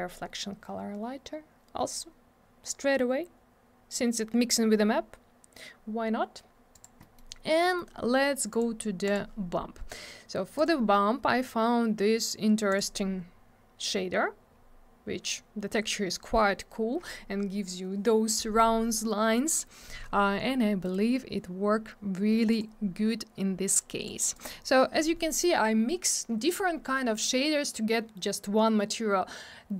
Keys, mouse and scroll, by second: 1.9-4.0 scroll up 1, 4.0-5.6 scroll down 1, 6.7 click, 6.8 click, 7.0 middle click, 7.1 double middle click, 7.3 scroll down 1, 7.6 middle click, 7.7 middle click, 8.5 click, 8.5 click, 9.0 click, 9.1 click, 10.5 click, 10.6 click, 12.6 click, 12.7 click, 14.6 scroll down 1, 20.8 click, 20.9 click, 22.4 click, 22.5 click, 23.7 click, 24.3 click, 24.4 click.